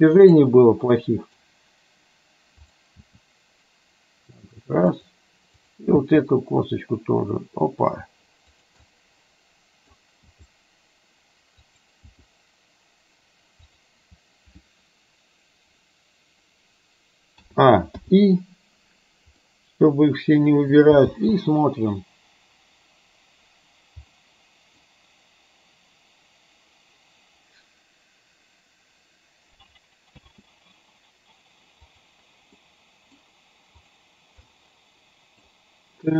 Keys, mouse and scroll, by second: 0.9 middle click, 2.8 click, 3.2 g, 6.0 g, 8.9 click, 9.0-10.0 middle drag, 10.4 g, 12.2 g, 17.5 a, 18.2 i, 19.5-20.9 middle drag, 21.2 space, 24.3-24.8 middle drag, 30.2 space, 31.9 click, 32.7-33.2 middle drag, 33.9 click, 34.5-35.5 middle drag.